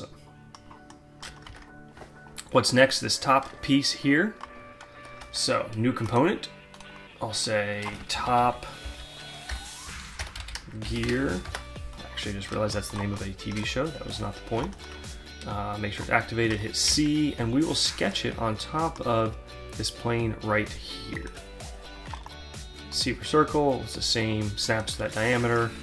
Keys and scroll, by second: 1.0 alt+Tab, 7.8-11.8 typing, 16.4 c.